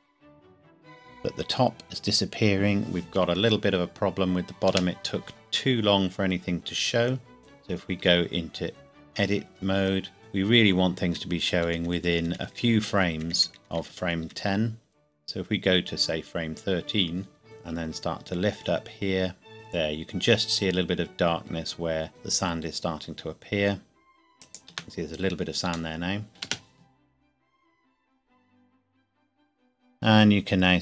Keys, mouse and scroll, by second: 4.6 space, 8.0 Tab, 10.8 Left, 11.5 Right, 17.4 g, 24.4 shift+click, 24.8-25.4 scroll down 1, 25.4 scroll up 1, 25.9 shift+middle click, 26.4 space.